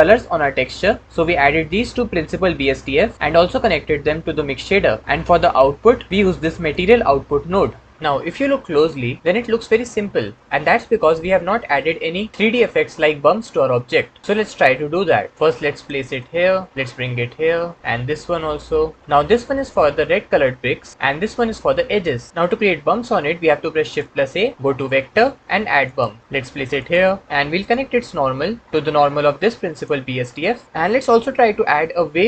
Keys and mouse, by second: 6.1-6.6 drag, 15.4 click, 16.0 click, 16.7-17.8 drag, 18.2 click, 21.1 click, 23.8 shift+a, 27.8-29.7 drag.